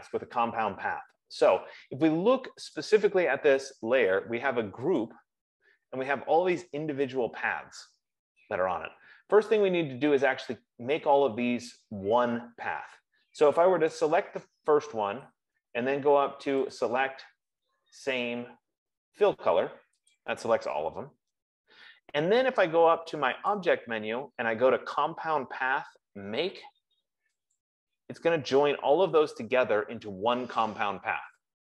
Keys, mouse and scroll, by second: 3.1 click, 5.4 click, 14.4 click, 17.2 click, 20.5 click, 23.7 click, 28.4 click, 28.6 F15.